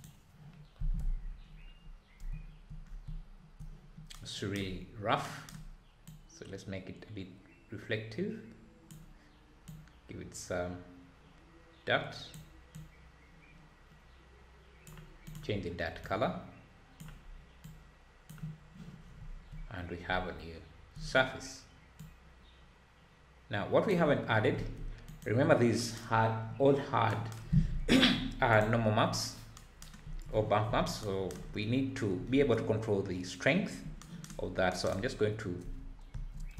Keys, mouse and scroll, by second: 2.3 `, 2.8 scroll up 4, 3.0 `, 6.2-16.0 drag, 19.0 scroll down 3, 19.2 `, 19.7 scroll up 1, 20.0 `, 22.2-24.3 drag, 24.3 scroll down 2, 24.5 `, 25.2 click, 36.1 space.